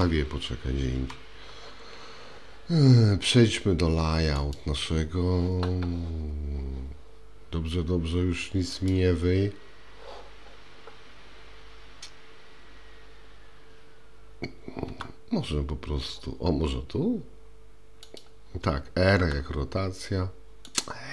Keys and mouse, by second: 0.9 Escape, 4.6 click, 14.9 g, 19.2 r, 20.8 click.